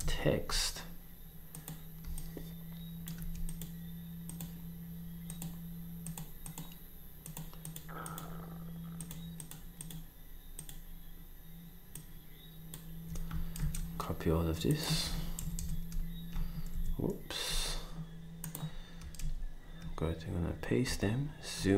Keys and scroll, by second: 0.0 Down, 13.6 ctrl+c, 15.0 ctrl+c, 15.4 Up, 15.6 Up, 16.7 Down, 20.8 v.